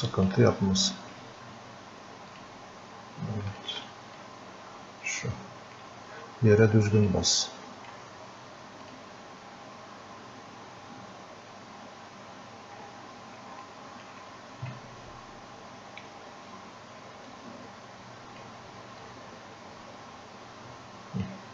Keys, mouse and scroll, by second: 4.5-6.1 drag, 7.4 click, 11.7-12.9 scroll up 2, 12.9-13.4 scroll up 1, 13.4 scroll up 1, 13.7-16.8 alt+drag, 17.3-19.1 drag, 19.1-21.5 drag.